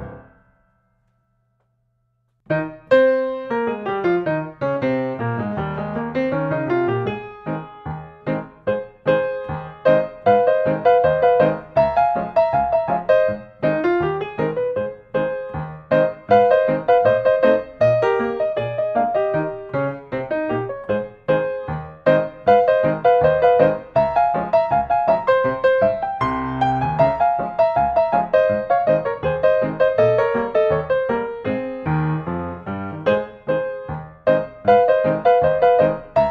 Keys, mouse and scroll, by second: 0.2 click, 1.8 click, 2.2 scroll, 2.8 scroll, 2.9 scroll, 3.0 scroll, 3.0 scroll, 5.0 scroll, 5.2 scroll, 5.4 scroll, 6.9-8.0 drag, 8.5-9.6 drag, 14.1-15.2 middle drag, 16.6-17.7 drag, 17.7 middle click, 18.1-18.7 scroll up 2, 18.7 scroll up 1, 24.5-24.8 scroll down 2, 24.8-25.3 scroll up 2, 27.3 scroll up 1, 27.7 middle click, 27.8-28.1 scroll down 1, 29.3 click, 34.3-35.1 drag, 35.1-36.3 scroll down 3.